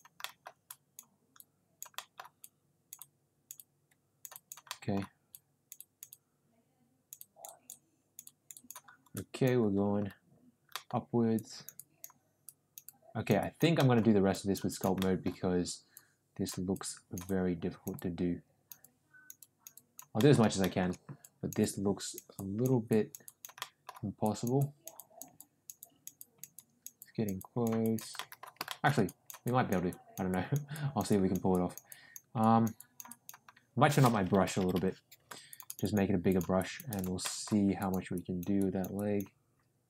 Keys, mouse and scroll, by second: 0.2 middle click, 0.6 click, 1.3 click, 1.9 middle click, 2.4 click, 3.5 click, 4.3 click, 4.6 middle click, 5.3 click, 6.1-7.7 drag, 9.1 click, 10.7 middle click, 11.3 click, 11.7 click, 12.4 click, 12.8 click, 13.4 click, 13.7 middle click, 14.4 click, 14.7 click, 14.9 middle click, 15.9 click, 16.7 click, 17.2 click, 17.9 click, 18.8 click, 19.4 click, 19.7 click, 20.1 middle click, 20.6 shift+middle click, 21.2 click, 21.6 click, 22.3 click, 22.9 click, 23.2 click, 23.6 middle click, 24.2 click, 24.5 click, 24.9 click, 25.3 click, 25.7 click, 26.1 click, 26.5 click, 27.0 click, 27.3 click, 27.8 click, 28.1 shift+middle click, 28.6 shift+middle click, 29.0 click, 29.4 click, 29.8 click, 30.2 click, 30.7 click, 31.0 click, 31.5 click, 31.8 click, 32.3 click, 32.7 click, 33.0 click, 34.4 ], 34.5 ], 34.7 ], 35.4 click, 35.6 click, 36.2 click, 36.5 click, 36.8 click, 37.2 middle click, 37.7 click, 38.1 click, 38.5 click, 38.9 click.